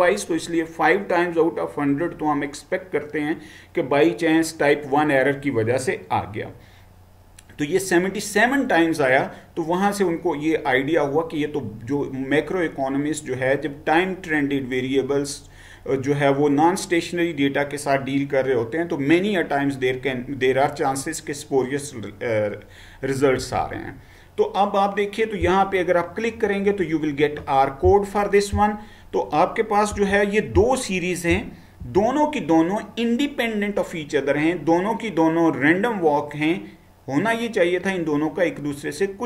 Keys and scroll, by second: 23.4 Right, 30.0 Left, 31.9 Down.